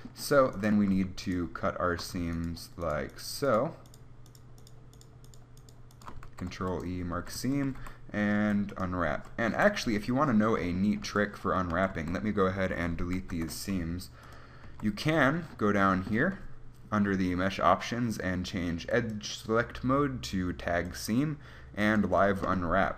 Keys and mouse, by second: 0.1 a, 6.5 ctrl+e, 7.5 a, 8.1 u, 8.7 u, 10.0 KP_1, 11.3 a, 12.1 a, 13.6 ctrl+e, 14.9 a, 22.4 click.